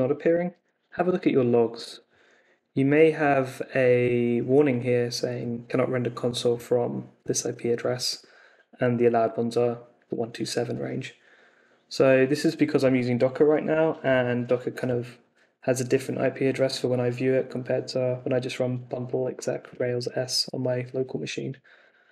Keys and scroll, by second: 1.2 super+Tab.